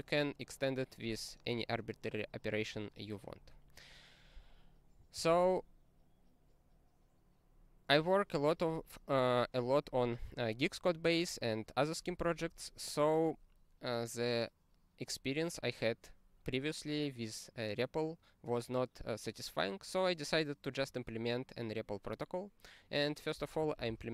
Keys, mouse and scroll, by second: 3.0-3.5 scroll down 8, 4.4 click, 4.6 click, 5.1 ctrl+a, 23.7 ctrl+space, 23.9 ctrl+e.